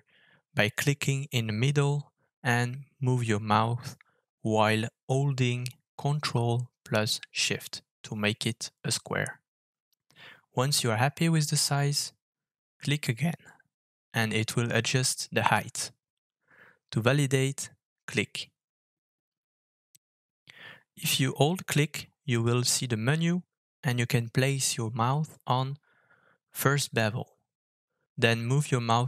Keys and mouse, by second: 20.0-29.0 shift+middle drag.